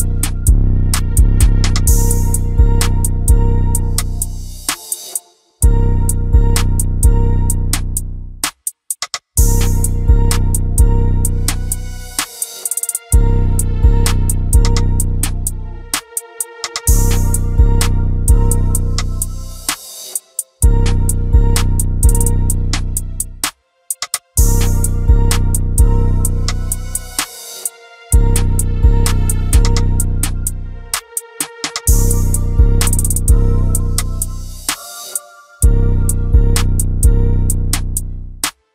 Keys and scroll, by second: 1.3-3.3 typing, 7.0 space, 7.5 space, 7.5 Escape, 16.0 space, 16.1 Escape, 25.5 shift+v, 34.8 space, 34.8 Escape.